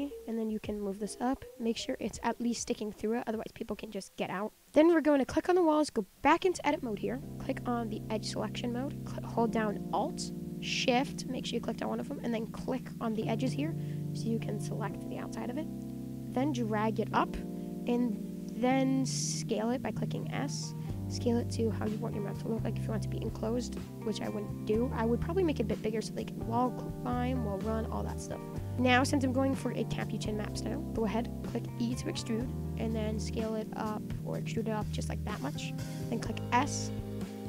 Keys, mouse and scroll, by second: 2.2 click, 2.5 scroll up 4, 2.7-3.7 middle drag, 3.7 scroll down 1, 3.9-4.3 middle drag, 4.3-4.6 scroll down 1, 4.6 middle click, 4.7 click, 4.7-5.2 middle drag, 5.2 click, 5.6-6.3 middle drag, 6.3 Tab, 8.1-9.9 drag, 12.6 alt+shift+click, 13.5-16.2 middle drag, 16.2 click, 17.4 middle click, 17.7 scroll down 2, 17.8-20.1 middle drag, 20.1 s, 25.0 middle click, 25.3 Tab, 25.3 scroll up 4, 25.5-26.4 middle drag, 26.4-26.8 scroll up 5, 26.8-27.2 middle drag, 27.2 scroll down 2, 27.4-27.8 middle drag, 27.8 scroll down 4, 28.0-28.7 middle drag, 28.7 ctrl+z, 28.9 scroll up 1, 29.0-30.5 middle drag, 30.5-31.8 scroll up 2, 31.8 e, 35.3 scroll down 3, 35.6 middle click, 35.9 s.